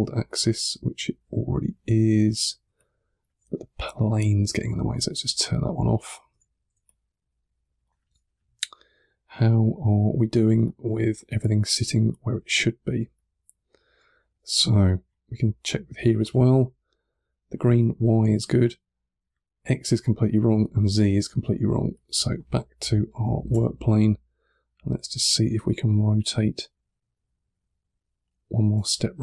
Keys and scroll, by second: 2.5 1, 5.9-7.1 typing, 8.9 2, 10.5 1, 12.8 1, 23.4 r.